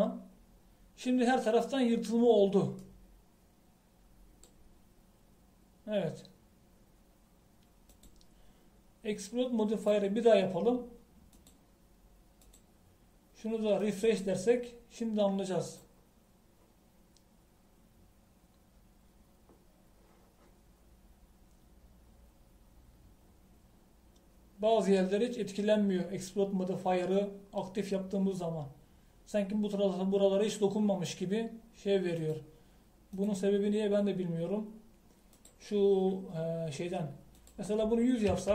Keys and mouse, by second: 4.0 middle click, 4.9 middle click, 9.0-11.0 drag, 33.5-38.5 drag.